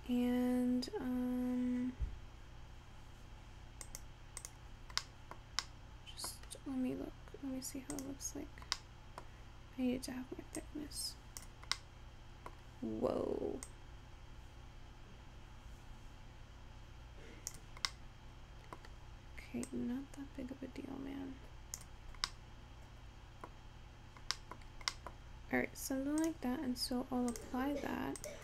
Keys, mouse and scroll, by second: 3.9 click, 5.1-6.6 middle drag, 6.6-8.0 scroll down 1, 8.0-9.0 drag, 9.0-10.7 middle drag, 10.7-11.9 drag, 11.9-14.1 middle drag, 14.1-17.1 drag, 18.5-20.3 middle drag, 20.3-22.6 drag, 22.6-24.3 middle drag, 24.3-25.1 scroll down 2, 25.1 middle click, 25.4-26.6 scroll down 1, 27.2-28.4 drag.